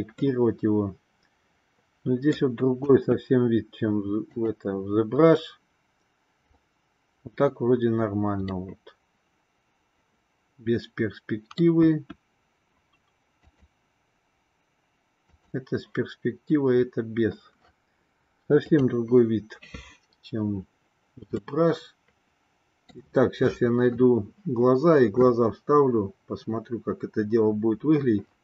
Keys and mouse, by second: 0.1-2.4 middle drag, 2.8 KP_1, 4.2 click, 8.7-11.7 middle drag, 11.8 KP_1, 13.4 click, 15.2 click, 18.6 click, 21.6-23.1 shift+middle drag.